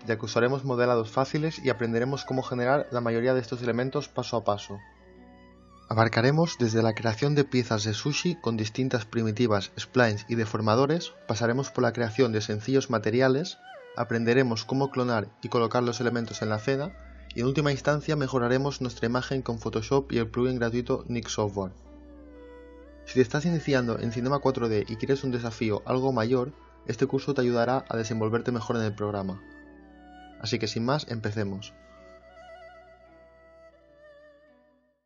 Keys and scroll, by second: 15.3 e, 16.6-17.5 typing, 20.8 space, 21.5 space.